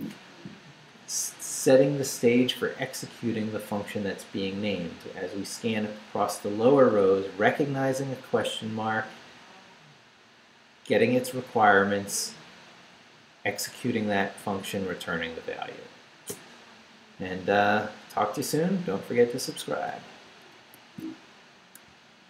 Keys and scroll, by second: 20.5 alt+shift+super+2.